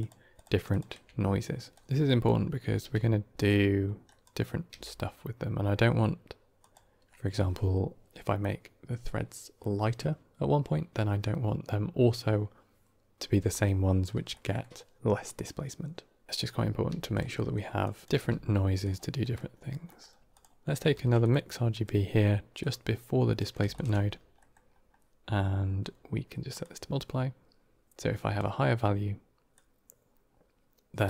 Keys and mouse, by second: 0.2 ctrl+shift+click, 0.6 ctrl+shift+click, 1.6 click, 1.8 g, 1.9 click, 2.7 g, 3.3 g, 4.0 middle click, 4.6 g, 14.2 middle click, 16.3 g, 16.8 g, 17.2 middle click, 17.7 drag, 18.0 g, 19.2 middle click, 19.7 middle click, 20.2 click, 20.8 shift+d, 21.6-22.6 drag, 23.3 middle click, 23.6 ctrl+shift+click, 24.2 middle click, 26.5-28.2 drag, 29.4-31.0 drag.